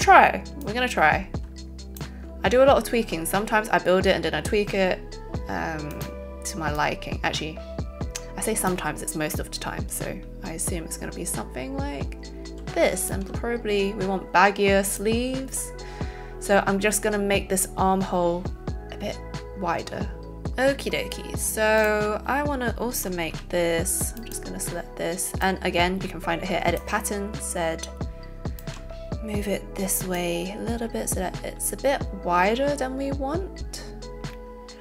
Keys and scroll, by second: 12.6 z, 13.2 shift+z, 23.3 z.